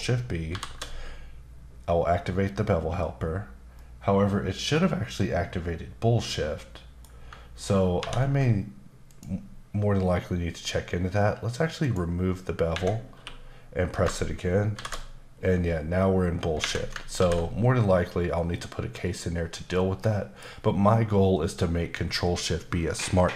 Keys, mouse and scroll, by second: 0.5 ctrl+shift+b, 3.8 middle click, 9.1 click, 11.8 click, 12.7 Escape, 14.7 ctrl+shift+b, 15.5-16.6 scroll down 3, 16.6 Escape, 17.2 ctrl+z, 19.8 middle click.